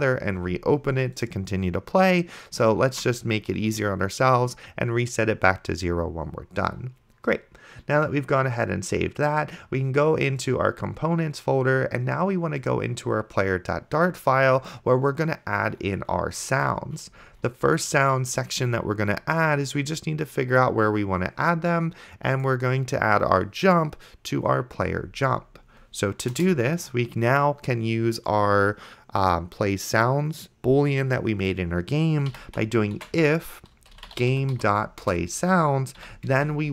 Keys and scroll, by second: 3.2 ctrl+s, 26.6 Return, 32.5-35.1 typing, 36.0 End, 36.5 space.